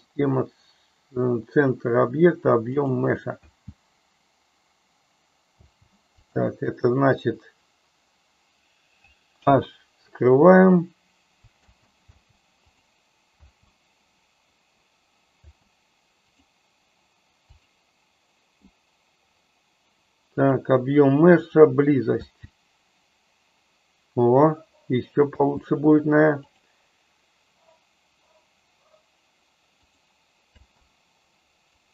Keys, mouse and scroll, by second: 3.5 space, 5.6 space, 6.2 click, 9.3 h, 11.4 space, 12.2 space, 12.8 click, 13.3 space, 15.5 space, 16.3 click, 20.4-21.6 drag, 22.2 space, 25.5 space, 26.5-30.1 drag, 30.6 space.